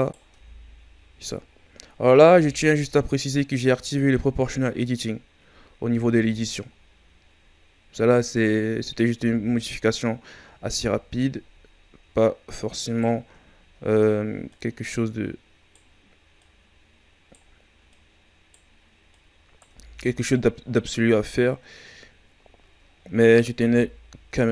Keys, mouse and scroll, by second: 0.3 Tab, 0.6-1.8 scroll down 4, 1.8-2.2 scroll up 5, 2.2 Tab, 3.2-3.6 ctrl+scroll up 1, 5.9 Tab, 6.8-7.5 scroll down 4, 7.5-8.7 ctrl+scroll up 5, 9.1 Tab, 9.8 right click, 13.5-13.9 shift+scroll down 4, 13.9-14.3 scroll up 1, 14.5 right click, 16.3 right click, 17.9 right click, 19.1 right click, 19.6 Tab, 21.0-22.1 scroll up 1, 22.1-22.9 ctrl+scroll down 5, 23.6 Tab, 23.8 scroll down 2, 24.3 Tab.